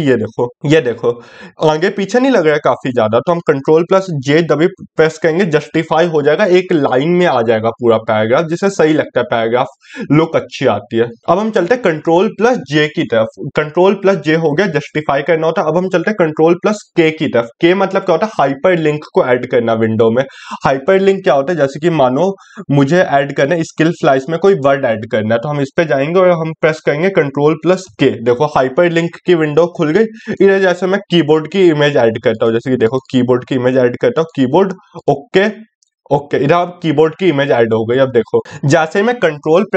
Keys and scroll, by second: 11.6 ctrl+k.